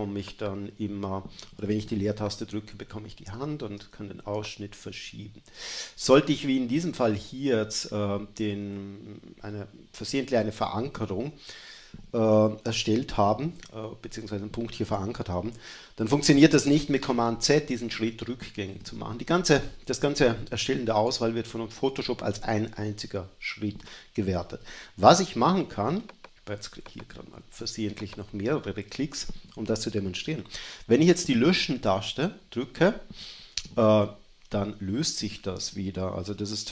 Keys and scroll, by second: 0.7 space, 32.6 BackSpace, 34.8 BackSpace.